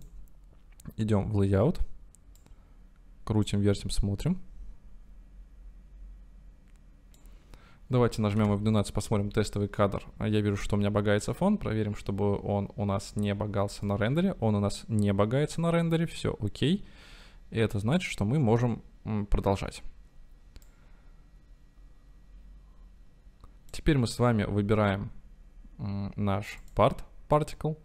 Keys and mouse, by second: 2.4-3.6 drag, 4.3-6.6 right drag, 6.6-7.5 drag, 20.7 click, 20.9-24.9 middle drag.